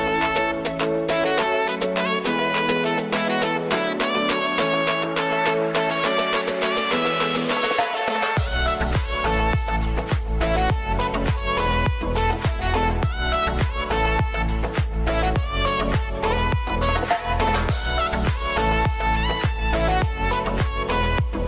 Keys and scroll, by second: 1.7 ctrl+t, 10.0 ctrl+space, 17.4 ctrl+z.